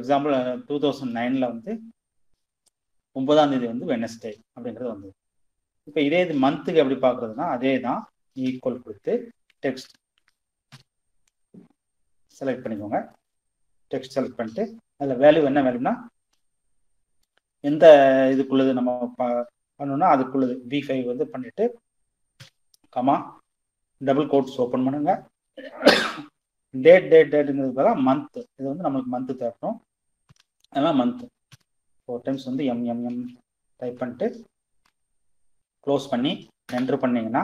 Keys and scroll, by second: 7.8-9.9 typing, 21.5 ,, 23.2 shift+', 29.4 m, 32.3 shift+', 33.9 shift+0, 35.8 Return.